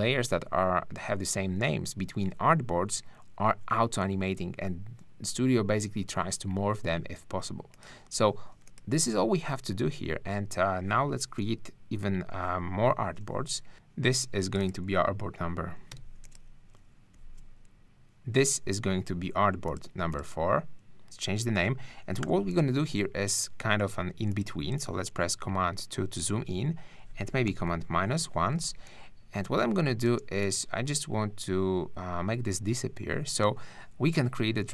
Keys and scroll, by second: 11.4 super+-, 15.9 ↺, 17.1 `, 22.2 4, 25.1 super+2, 27.5 super+-, 28.4 super+space.